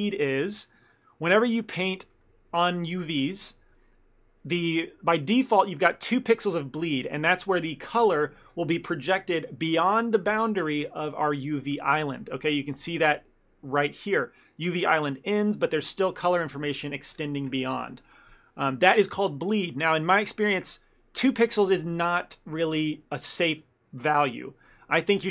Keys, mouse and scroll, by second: 0.0 shift+middle click, 0.3 ctrl+middle click, 1.3 shift+middle click, 1.6 ctrl+middle click, 2.6 shift+middle click, 12.5 ctrl+middle click.